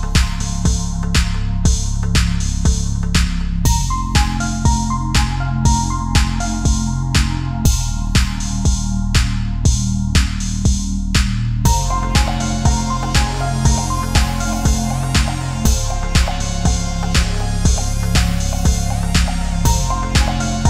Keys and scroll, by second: 1.1 ctrl+c, 1.2 ctrl+v, 6.6 ctrl+=.